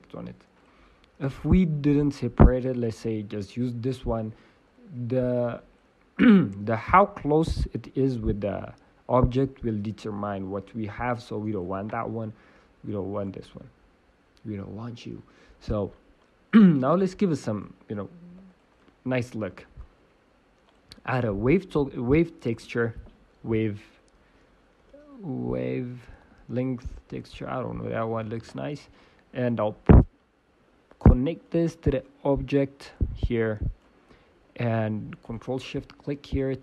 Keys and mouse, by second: 0.5-9.3 drag, 0.5 right click, 1.9-3.6 right drag, 11.6-13.2 drag, 13.5-14.9 drag, 27.2 BackSpace, 31.4-34.2 drag, 34.0 middle click, 34.2 middle click.